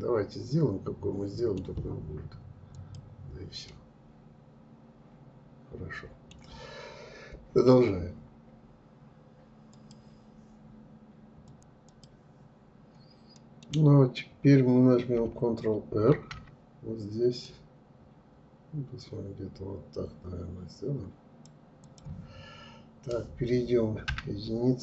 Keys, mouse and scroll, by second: 2.3 click, 3.3-6.3 middle drag, 12.5 middle click, 13.2 scroll down 2, 13.9-14.7 scroll up 1, 15.3 ctrl+r, 22.0-23.3 scroll up 2, 23.3 1.